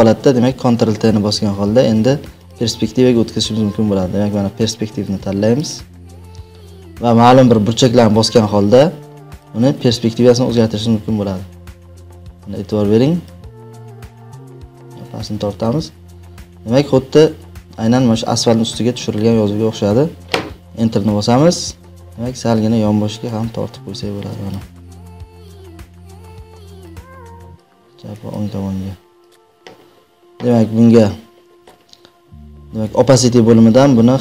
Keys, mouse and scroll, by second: 1.3 ctrl+t, 2.4 right click, 5.5 click, 7.2-8.5 drag, 13.2 click, 15.2-18.0 drag, 20.6 Return, 21.7 ctrl+t, 24.4-25.5 drag, 26.8 click, 28.3 click, 29.2 click.